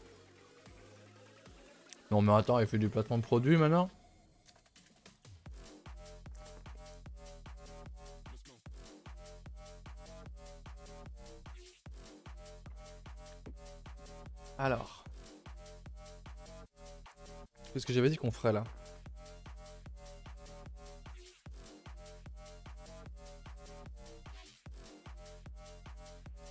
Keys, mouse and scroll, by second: 0.0 scroll, 0.0 scroll down 3, 0.2 a, 0.7 shift+middle click, 1.0-1.4 scroll up 1, 18.6-23.0 middle drag.